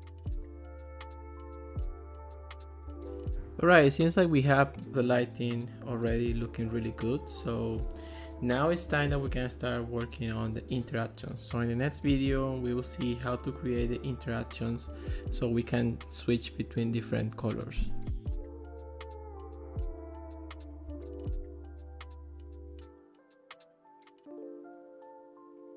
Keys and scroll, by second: 1.0 1, 1.1 Return, 1.2 super+z, 1.4 Return, 2.0 Escape.